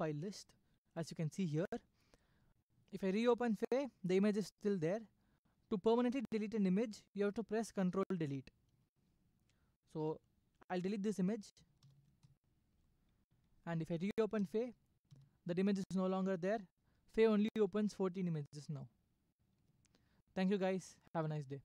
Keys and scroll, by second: 2.5 Escape, 3.2 Up, 3.5 Return, 10.3 Left, 13.4 ctrl+Delete, 14.9 Escape, 15.7 Up, 16.0 Return, 16.7 Left, 21.2 Escape.